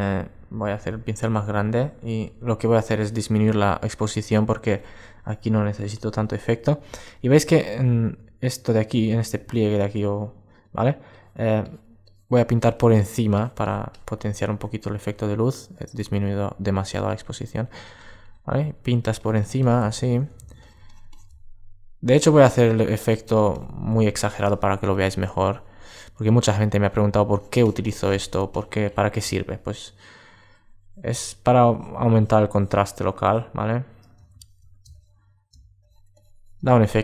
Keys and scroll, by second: 0.9 alt+space, 6.6 super+space, 14.1 alt+space.